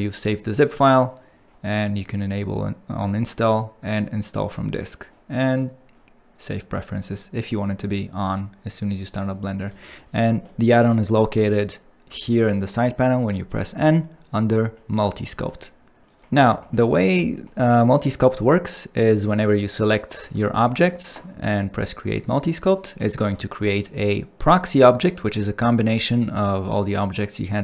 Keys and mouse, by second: 12.0 n, 16.6 shift+middle click, 19.1 click, 20.2 ctrl+drag, 23.0 shift+middle click.